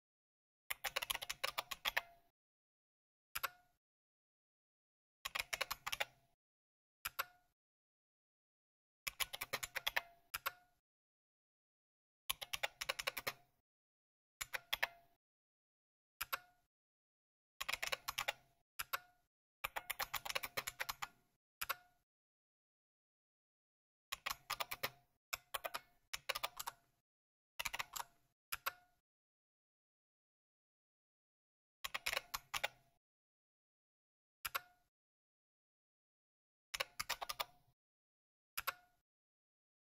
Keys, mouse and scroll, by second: 0.4-2.3 typing, 3.3 Return, 5.0-6.4 typing, 7.0 Return, 8.7-10.6 typing, 12.0-21.6 typing, 23.8-29.0 typing, 31.6-33.0 typing, 34.4 Return, 36.4-37.7 typing, 38.5 Return.